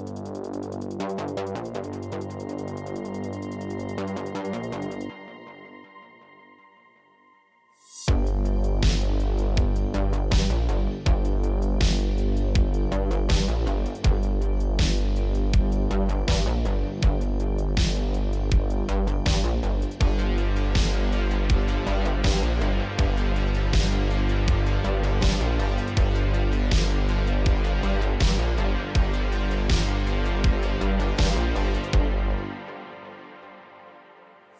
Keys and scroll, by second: 1.2 shift+s, 2.0 Tab, 3.0 Tab, 3.7 shift+s, 4.5 Tab, 8.9 Tab, 10.8 g, 11.8 g, 14.0 Tab, 15.3 Tab, 15.8 g, 19.8 Tab, 20.2 Tab, 20.4 2, 25.0 shift+s, 25.5 Tab, 27.6 Tab, 28.4 shift+s, 29.7 ctrl+z, 30.6 shift+s, 30.9 Tab, 32.4 ctrl+Tab, 33.3 r, 33.5 z.